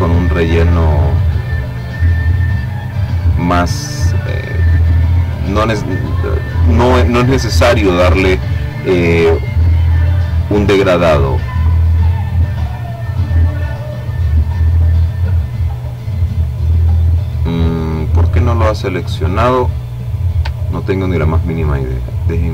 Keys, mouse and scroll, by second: 3.2-4.9 drag, 9.9 click, 10.6 click, 14.8 click, 18.9-19.5 ctrl+scroll up 2, 19.9-22.5 ctrl+drag.